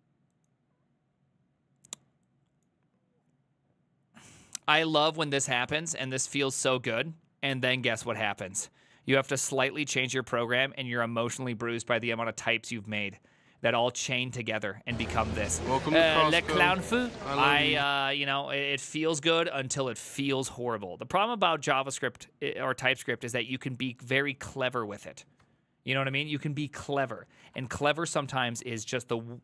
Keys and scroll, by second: 25.5 alt+{, 26.3 ctrl+c, 26.4 ctrl+c, 26.5 ctrl+c, 26.7-29.4 typing.